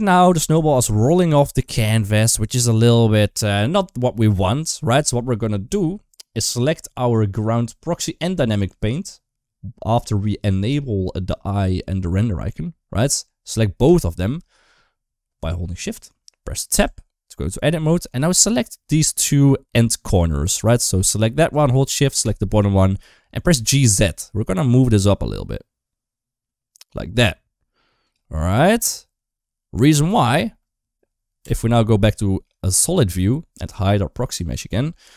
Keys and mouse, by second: 0.4 shift+middle click, 1.5 shift+middle click, 1.8 middle click, 2.2 Tab, 2.7 Tab, 3.1 shift+middle click, 10.4 click, 13.7 shift+click, 16.6 Tab, 17.5 middle click, 18.9-20.0 drag, 20.9 click, 22.0 shift+click, 22.7 middle click, 23.6 g, 28.1-29.7 middle drag, 31.3 Tab, 32.1 shift+middle click, 34.0 click, 34.8 middle click.